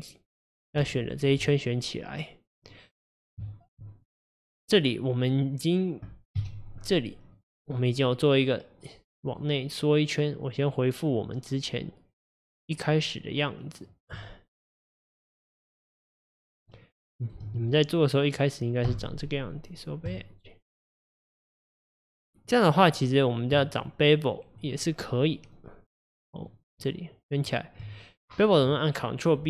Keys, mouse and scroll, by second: 0.8 alt+click, 1.1 alt+click, 1.5-6.4 middle drag, 6.4 KP_Divide, 6.9-7.4 scroll down 2, 7.4-9.3 middle drag, 9.3 click, 14.5 shift+click, 15.1 shift+click, 15.6 shift+click, 16.0 shift+click, 16.5 shift+click, 16.8 shift+click, 17.2 shift+click, 18.9 x, 21.8-22.9 middle drag, 22.9 click, 23.8 shift+click, 24.7 shift+click, 25.5 shift+click, 25.9 shift+click, 26.5 shift+click, 26.8 shift+click, 27.4 shift+click.